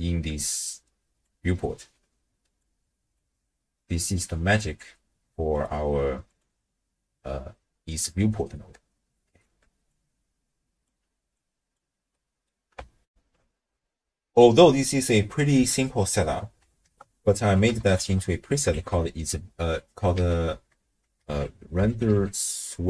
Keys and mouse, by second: 6.3 click, 7.6 middle click, 8.1 d, 8.3-9.4 drag, 9.4 d, 9.6 d, 10.0 click, 11.4 click, 12.1 middle click, 13.1 ctrl+alt+shift+w, 13.2 ctrl+alt+shift+q, 16.8 ctrl+a, 20.2 ctrl+a.